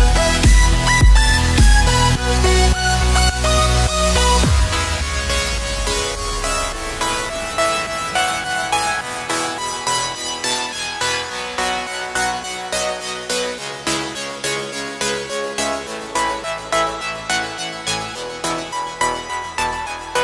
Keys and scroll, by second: 14.8 space, 14.8 x, 15.6 space, 18.4 space.